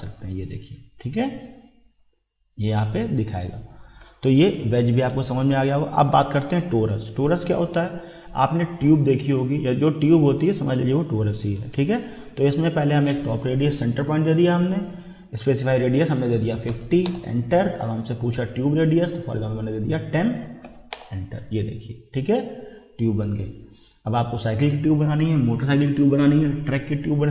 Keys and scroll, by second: 3.9 Escape, 16.4 5, 16.7 0, 17.1 Return, 20.2-21.1 typing.